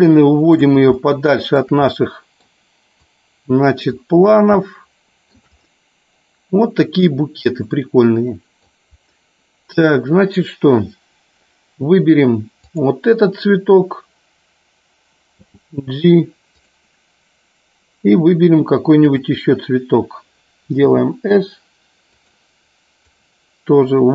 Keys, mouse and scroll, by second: 0.8 shift+middle click, 1.8 scroll up 1, 1.9-2.4 middle drag, 2.9 click, 4.6 shift+middle click, 5.2 shift+scroll down 1, 7.7 scroll up 1, 7.8 middle click, 12.6 click, 16.5 click, 22.1 click, 22.9-24.1 drag.